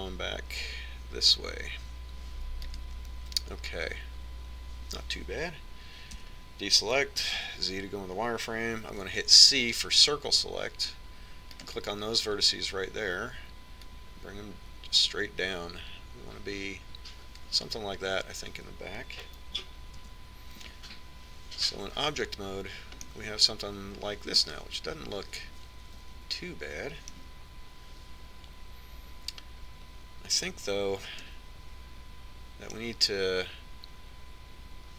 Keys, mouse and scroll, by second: 6.9 a, 8.2 z, 9.8 c, 13.3-14.7 right drag, 14.7-15.7 middle drag, 15.7 click, 20.8 z, 23.0 Tab, 23.9-25.8 middle drag, 31.3 Tab, 32.2-34.1 middle drag.